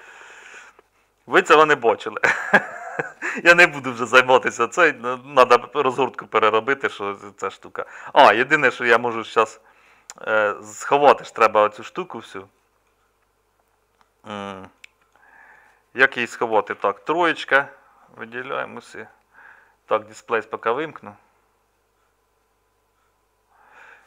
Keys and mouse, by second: 8.7 Tab, 16.8 3.